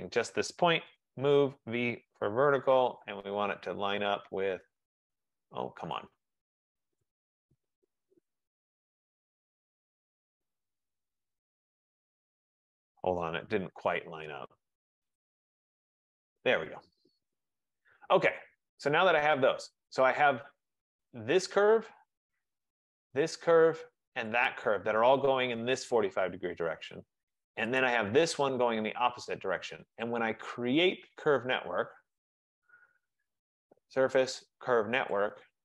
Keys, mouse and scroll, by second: 0.0 click, 0.8-2.3 typing, 3.1 click, 7.1-7.8 typing, 7.7 right click, 9.9 click, 11.3 right click, 11.7 middle click, 11.7-12.3 middle click, 11.9 middle click, 11.9 middle click, 12.2 middle click, 12.3 middle click, 13.4 typing, 14.8 scroll, 15.5 click, 16.5 click, 17.1-18.2 scroll, 18.2 Escape, 18.4 Escape, 18.6 Escape, 18.9 middle click, 19.0 middle click, 19.1 middle click, 20.2 right click, 21.2 click, 23.2 shift+click, 24.5 click, 28.0 click, 30.2 click, 35.2 click.